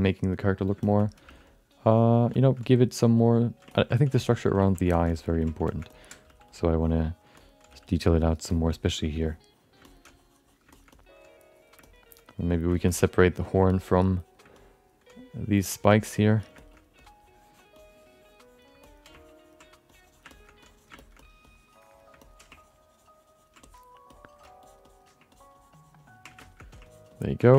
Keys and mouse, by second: 0.8 alt+shift+middle click, 1.0 alt+middle click, 1.2 f, 1.5 click, 2.3 alt+shift+middle click, 2.5 click, 3.7 ctrl+alt+middle click, 4.1 alt+shift+middle click, 4.3 alt+middle click, 4.6 ctrl+alt+middle click, 4.9 shift+middle click, 5.0 alt+middle click, 5.4 alt+middle click, 5.6 shift+middle click, 5.9 middle click, 6.4 f, 6.6 click, 6.7 click, 7.3 alt+middle click, 7.6 f, 7.9 click, 8.5 alt+shift+middle click, 9.2 click, 9.2 f, 9.8 middle click, 10.1 click, 10.7 alt+shift+middle click, 10.9 middle click, 11.2 click, 11.8 middle click, 12.0 click, 12.7 alt+shift+middle click, 12.8 alt+middle click, 13.2 click, 13.7 alt+middle click, 14.0 click, 14.5 alt+middle click, 15.1 click, 15.9 alt+shift+middle click, 16.1 click, 16.6 alt+shift+middle click, 16.7 middle click, 16.9 click, 17.7 click, 18.8 alt+middle click, 19.1 ctrl+click, 19.9 click, 20.3 shift+middle click, 20.6 click, 21.0 alt+shift+middle click, 21.0 alt+shift+right click, 21.2 alt+middle click, 22.2 alt+middle click, 22.5 ctrl+click, 23.6 alt+middle click, 24.1 alt+middle click, 24.6 ctrl+click, 24.9 ctrl+click, 25.3 ctrl+click, 26.4 alt+shift+middle click, 26.8 ctrl+click, 27.2 ctrl+click, 27.5 alt+shift+middle click.